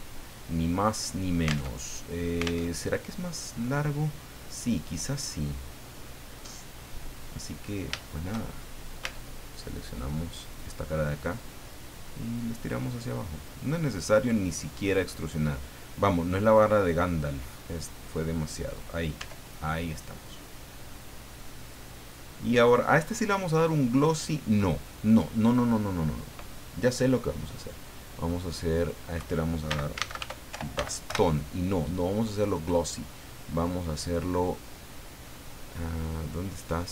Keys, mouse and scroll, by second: 0.4-1.6 middle drag, 1.7 alt+Tab, 2.6 alt+Tab, 6.9 click, 7.5 middle click, 7.5-7.9 scroll up 3, 7.9 shift+middle click, 8.0 shift+click, 8.5 shift+middle click, 9.0 Tab, 10.4 right click, 11.3-13.6 drag, 13.8 middle click, 14.5-14.8 scroll down 1, 16.7-18.9 drag, 19.2 Tab, 19.6 scroll down 1, 20.0 middle click, 21.6 click, 23.0 click, 28.7 click, 29.4-31.2 typing, 32.2 click, 34.2-34.9 scroll down 2, 35.2-35.8 scroll up 2.